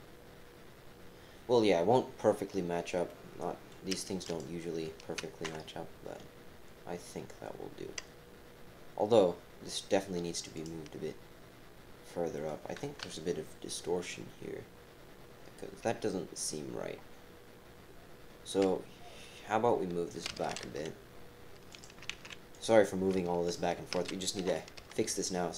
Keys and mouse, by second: 3.0 right click, 4.3 click, 5.5 KP_7, 10.5 click, 12.3 click, 13.1 KP_3, 20.3 g, 22.1 ctrl+z, 22.5 click, 23.4 shift+click, 24.4 g.